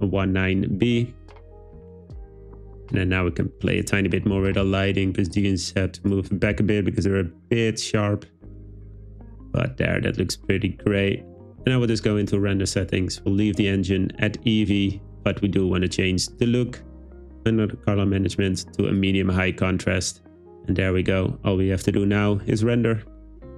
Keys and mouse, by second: 1.7 click, 3.8 click, 4.4 g, 4.5 z, 4.7 z, 5.4 click, 6.1 click, 6.4 g, 6.4 z, 6.6 z, 9.5 click, 16.5-19.1 drag, 23.5 click.